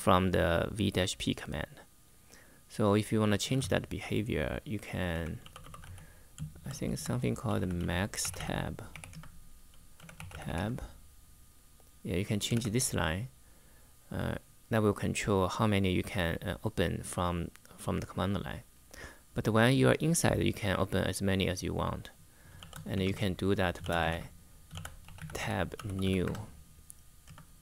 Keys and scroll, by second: 3.0-10.7 typing, 12.2 shift+v, 22.0-26.2 typing, 27.0 Return.